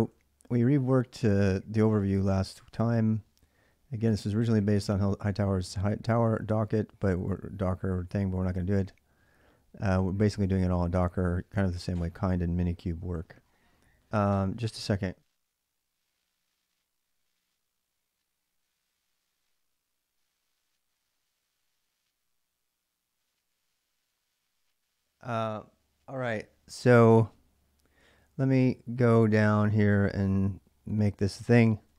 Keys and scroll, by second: 3.2-11.2 typing.